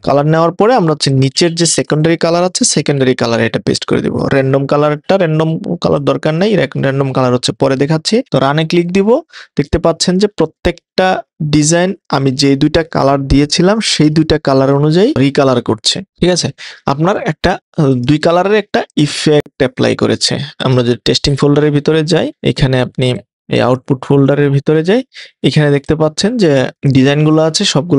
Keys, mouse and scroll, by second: 2.7 super+v.